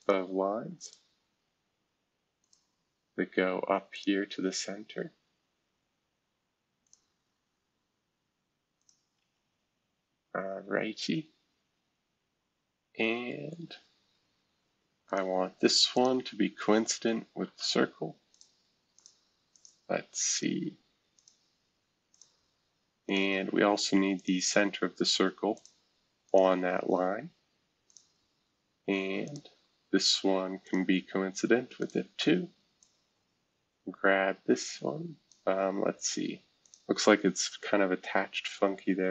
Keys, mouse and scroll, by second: 0.0 click, 0.8 click, 2.4 click, 2.9 scroll down 1, 3.9 click, 6.8 click, 7.3 scroll down 1, 8.8 click, 9.2 Escape, 9.5-11.6 scroll down 1, 12.6-14.2 scroll up 1, 14.2 scroll up 1, 15.0 click, 15.9 shift+click, 18.3 click, 19.0 click, 19.5 click, 20.3 shift+click, 21.2 click, 22.1 click, 23.0 click, 24.1 shift+click, 25.5 click, 26.2 click, 27.9 click, 29.2 shift+click, 30.6 click, 31.8 click, 32.8-35.3 drag, 36.6 click, 37.5 Delete.